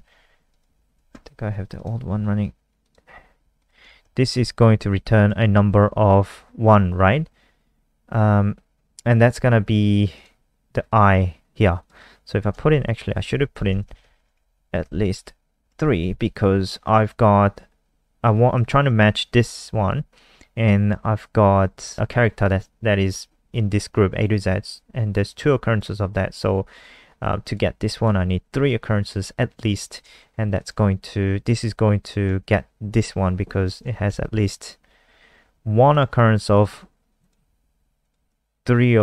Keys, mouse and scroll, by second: 0.5 click, 3.8 ctrl+s, 4.0 F5, 4.8 alt+click, 10.1 click, 12.9 Right, 13.1 Right, 13.3 shift+Left, 13.5 shift+Left, 13.7 shift+Left, 13.8 shift+Left, 14.0 shift+Left, 14.2 ctrl+c, 15.7 ctrl+v, 18.5 click, 34.0 ctrl+s, 35.8 click.